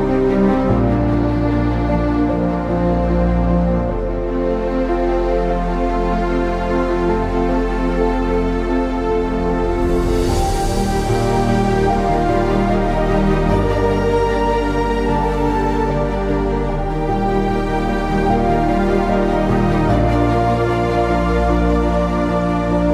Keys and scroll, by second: 0.0-0.8 typing, 2.7-4.1 typing, 5.6 ctrl+z, 8.3-11.6 typing, 13.6 typing, 14.9 ctrl+z, 15.4 ctrl+z, 15.4-20.4 typing.